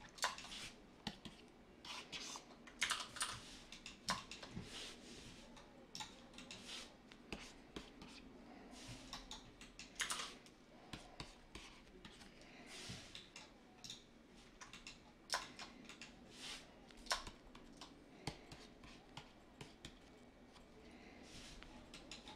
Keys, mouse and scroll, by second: 2.8 ctrl+z, 3.2 ctrl+z, 10.0 ctrl+z.